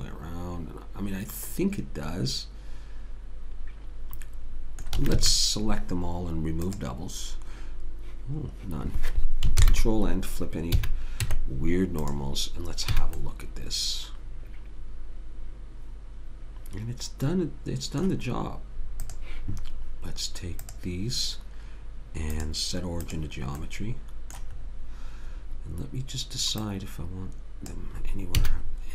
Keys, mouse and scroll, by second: 5.0 a, 5.1 a, 6.7 click, 9.7 ctrl+n, 10.8 a, 11.3 Tab, 13.0 a, 13.2-14.5 middle drag, 19.0-24.0 drag, 23.6 right click, 24.1-26.5 middle drag, 26.6 click, 28.4 a.